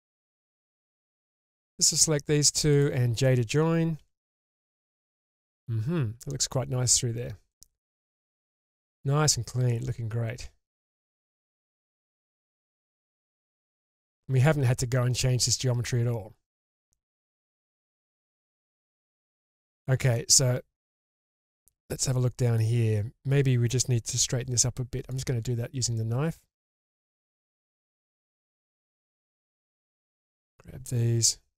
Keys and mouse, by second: 0.6 middle click, 1.8 click, 2.7 shift+click, 4.0 j, 4.5 drag, 5.2-6.3 middle drag, 6.8 Tab, 7.5-12.8 middle drag, 13.2 Tab, 14.2 middle drag, 16.8-17.2 shift+middle drag, 17.4-17.7 shift+middle drag, 18.1-18.5 middle drag, 19.2-19.6 middle drag, 19.8 shift+middle drag, 20.1-22.6 middle drag, 24.1 k, 28.5 2, 29.2 click, 30.3 ctrl+click.